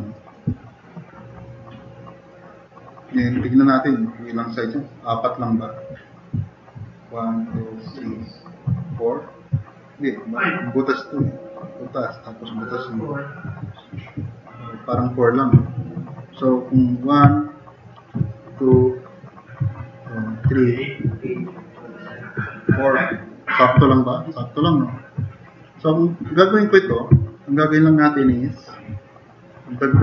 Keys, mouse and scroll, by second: 0.3 click, 0.7 click, 0.8 middle click, 1.4 middle click, 2.4-3.0 drag, 15.6-16.7 drag, 17.4-17.7 drag, 18.8-19.2 drag, 19.8-20.2 drag, 21.8 click, 22.8 drag, 23.8 click, 24.9-25.6 drag, 26.1 drag, 27.8 middle drag.